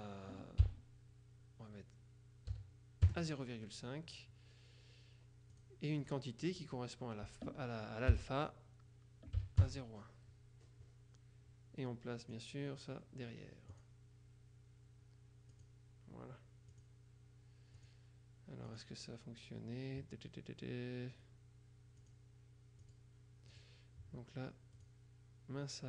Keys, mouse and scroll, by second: 0.7 ,, 2.6 KP_5, 3.1 KP_Enter, 5.6 click, 8.2 ,, 9.5 KP_1, 9.7 KP_Enter, 12.3 click, 13.8 click, 15.6 click, 16.8 click, 17.9 click, 18.7 click, 22.1 click, 22.9 click, 24.9 click.